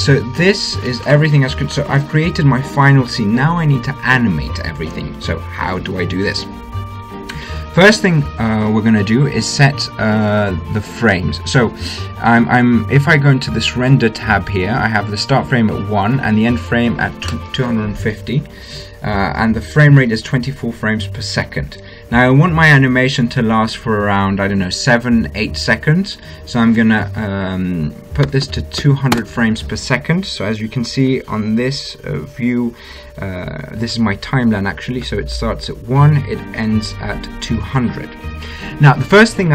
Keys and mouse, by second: 14.2-16.2 drag, 27.1-28.9 drag.